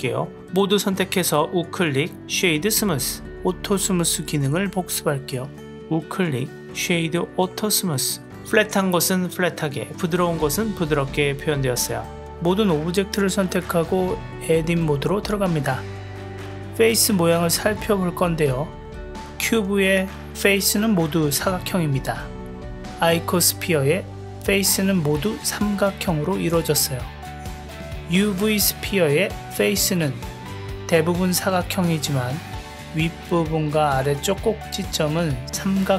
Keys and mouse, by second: 0.0-0.5 drag, 0.9-2.8 right drag, 3.6 click, 5.2 click, 6.3-7.7 right drag, 8.0 click, 8.3 click, 9.4 click, 10.6-11.3 drag, 12.4 Tab, 12.9 click, 14.3 click, 15.6 KP_Decimal, 17.0 click, 17.8-18.9 middle drag, 19.9 g, 20.5 middle click, 22.0 click, 24.2-26.4 middle drag, 26.7 g, 27.7 click, 28.4 click, 29.2 middle click, 30.6 click, 33.3 middle click, 35.7 click.